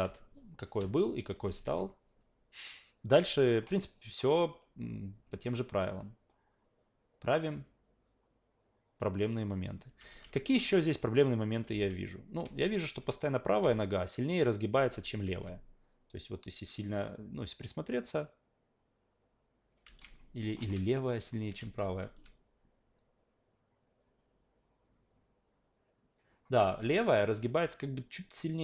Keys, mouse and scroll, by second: 10.0 alt+v, 10.9 click, 11.7 alt+v, 12.5 alt+v, 13.6 alt+v, 14.7 alt+v, 15.3 alt+v, 19.8 alt+v, 20.5 click, 21.6 alt+v, 22.0 alt+v, 26.6 alt+v, 28.3-28.6 drag.